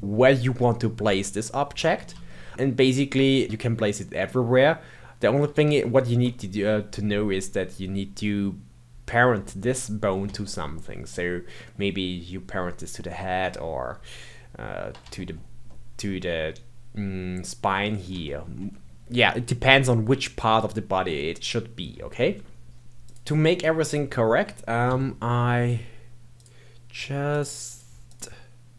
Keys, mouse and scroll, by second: 2.2-4.4 shift+middle drag, 5.8-8.8 shift+middle drag, 10.4-14.1 shift+middle drag, 15.1-21.2 shift+middle drag, 22.1 shift+middle click, 22.8 KP_1, 23.0 click, 24.8 n, 26.3 click, 27.3 click, 27.6 click, 28.0 click.